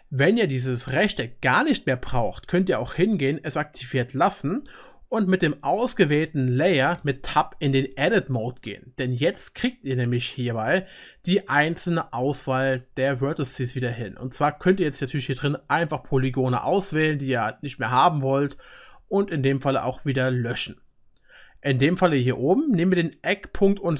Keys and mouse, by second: 0.0 F12, 0.0-3.5 middle drag, 3.5-4.7 drag, 4.7-15.1 middle drag, 7.8 Tab, 14.8-23.9 drag.